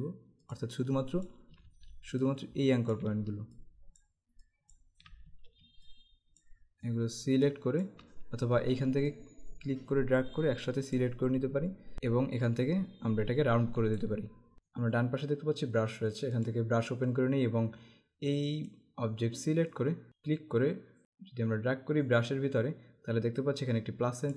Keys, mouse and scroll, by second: 1.7 ctrl+z, 2.2 click, 3.6 shift+click, 5.9 click, 7.5 click, 9.2 click, 11.9 z, 12.6 click, 16.5 click, 18.6 click, 20.1 click.